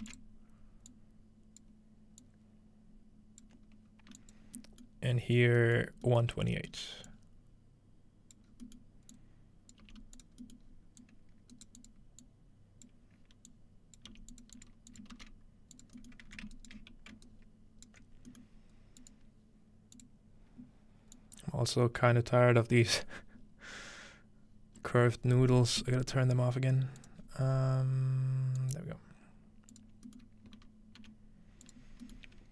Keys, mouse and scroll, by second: 4.2 click, 4.4 scroll down 1, 4.9 scroll up 2, 5.9 scroll down 1, 7.1-8.4 drag, 8.5 scroll down 2, 9.1-11.5 drag, 9.7-10.2 scroll down 1, 9.8 g, 10.8-12.5 scroll up 1, 11.7 click, 11.7 right click, 13.5 click, 14.1 g, 14.6 drag, 14.9 click, 15.2 typing, 15.4 click, 15.9-17.3 drag, 16.1-17.9 alt+middle drag, 16.1-17.9 alt+right drag, 19.0 click, 20.0 click, 21.2 click, 24.5 scroll down 2, 24.8-25.6 scroll up 2, 25.6-26.2 scroll up 1, 27.0 click, 27.2-28.5 scroll down 3, 28.5 scroll down 1, 28.6 click, 29.7 click, 30.6-31.9 scroll up 2, 31.0 g, 31.7 click, 31.9 scroll down 1, 32.3 scroll up 1.